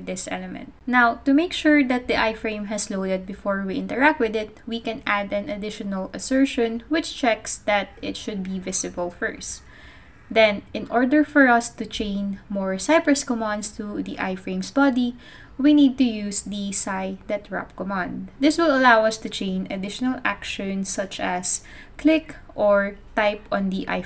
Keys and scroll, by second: 2.6 Tab, 2.8 Tab, 4.2 Return, 4.7-8.5 typing, 10.3-16.6 typing.